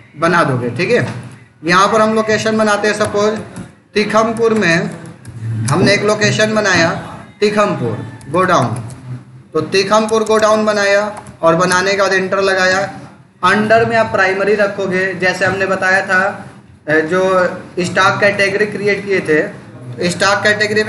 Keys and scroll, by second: 2.9 t, 5.5 space, 8.0-10.8 typing, 11.6 Return.